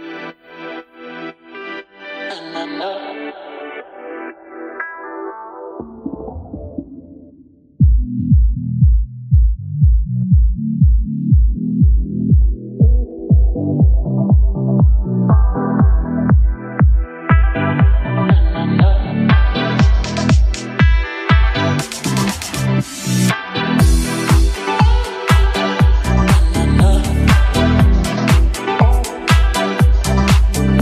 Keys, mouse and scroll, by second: 1.1 click, 5.2 click, 8.2 click.